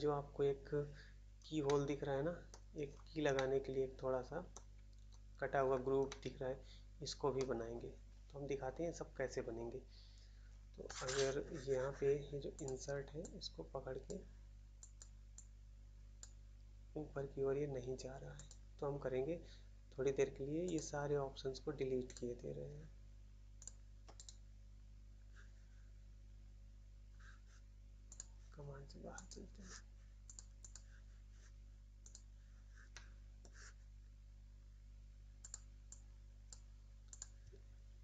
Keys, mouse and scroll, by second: 1.6 middle click, 2.5 middle click, 2.8-3.3 scroll down 1, 3.3 middle click, 4.5 middle click, 5.5 scroll up 1, 6.0 middle click, 7.3 middle click, 12.5 click, 12.6 click, 14.0 click, 14.9 click, 16.1 click, 16.7 click, 18.3 click, 18.4 click, 20.6 click, 20.7 click, 22.0 click, 22.1 click, 23.5 shift+click, 24.1 right click, 24.2 right click, 28.0 click, 28.1 click, 29.0 click, 29.1 click, 29.2 click, 30.2 click, 30.3 click, 30.7 click, 32.0 click, 32.1 click, 32.9 middle click, 33.3 middle click, 35.3 click, 35.5 click, 36.5 click, 37.1 click.